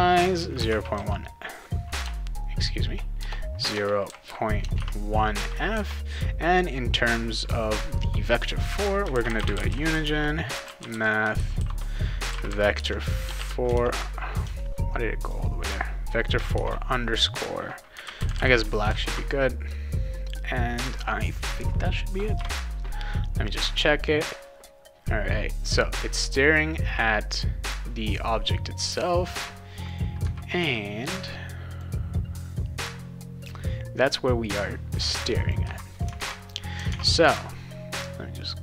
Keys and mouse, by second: 0.4 0, 2.0 BackSpace, 3.2-5.3 typing, 8.9-13.3 typing, 13.7 ctrl+-, 15.2 click, 16.5 shift+-, 17.7-18.8 typing, 19.0 ctrl+s, 26.9 click, 29.9 click, 31.7 click, 35.3 click, 36.2 alt+Tab, 36.9 alt+Tab, 38.4 click.